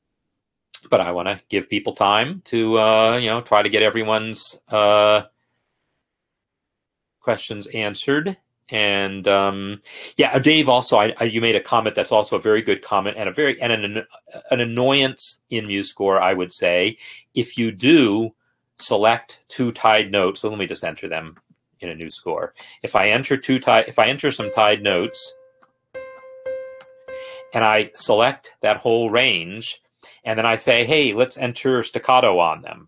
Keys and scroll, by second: 0.0 ctrl+\, 0.3 Home, 23.0 n, 24.3-24.6 typing, 25.7-26.8 typing, 27.3 Escape.